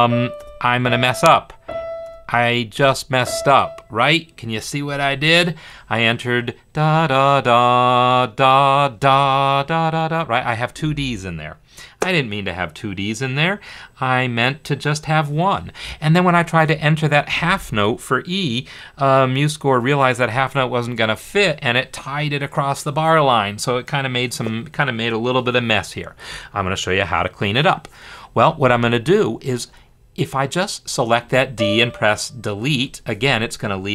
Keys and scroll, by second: 0.0-2.7 typing, 28.7 Escape, 32.8 BackSpace.